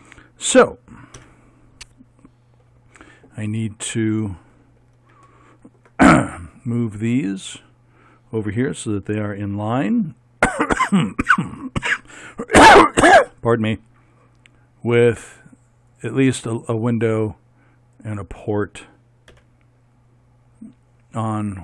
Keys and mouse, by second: 1.2 KP_1, 5.3 middle click, 5.5 middle click, 9.8 g, 19.3 g.